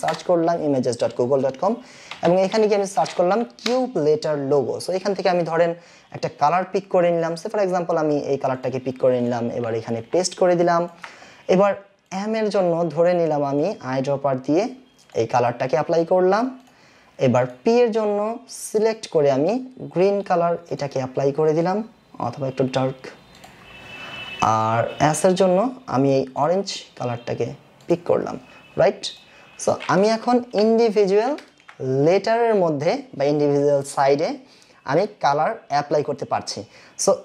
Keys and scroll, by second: 0.0-0.4 typing, 2.0-3.2 typing, 3.3 Down, 30.6 Delete.